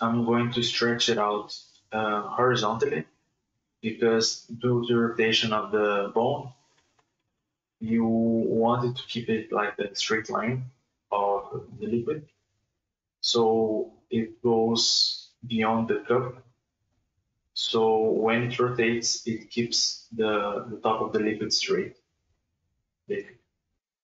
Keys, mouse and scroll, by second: 0.1 alt+shift+right click, 0.4 alt+shift+right click, 0.6 alt+shift+right click, 0.9 alt+shift+right click, 1.5 alt+s, 3.3-3.7 scroll down 3, 3.9-4.9 middle drag, 4.9 KP_1, 5.6 alt+s, 7.9 KP_Divide, 8.7 click, 9.0 middle click, 9.7 right click, 10.4 ctrl+right click, 10.9 ctrl+KP_Add, 11.4 KP_1, 11.7 scroll up 1, 11.9 shift+space, 12.9 click, 13.3 ctrl+z, 13.6 click, 14.5 middle click, 15.3-15.7 scroll up 3, 15.7 right click, 15.8 middle click, 16.2 ctrl+right click, 16.6 ctrl+KP_Add, 16.8 KP_1, 17.6-19.0 drag, 19.0 KP_Divide, 19.5 scroll up 1, 19.6 shift+middle click, 19.9 shift+space, 20.4 scroll up 1, 20.6 shift+middle click, 20.9-22.1 drag, 22.1 scroll down 4, 22.3 Tab, 22.5-23.6 middle drag, 23.6 right click.